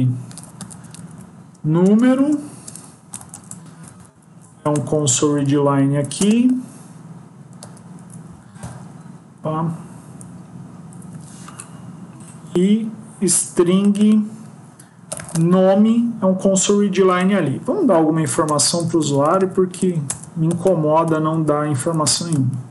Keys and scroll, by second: 3.1 Down, 3.2 Left, 3.7 ctrl+shift+Right, 4.3 shift+Left, 5.0 ctrl+c, 5.2 Up, 6.4 ctrl+b, 7.5 ctrl+v, 18.1 Up, 20.0 Return, 21.7 Up, 21.9 Return.